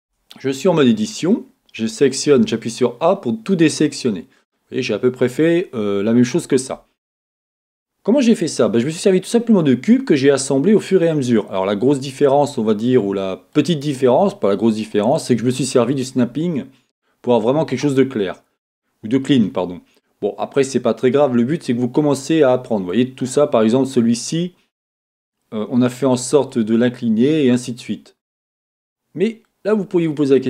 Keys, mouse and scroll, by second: 0.1 Tab, 0.6-30.4 middle drag, 4.6-5.4 scroll up 2, 5.4-6.9 scroll down 2, 6.9-8.7 scroll down 1, 11.1-11.7 scroll up 2, 11.7-12.9 scroll down 2.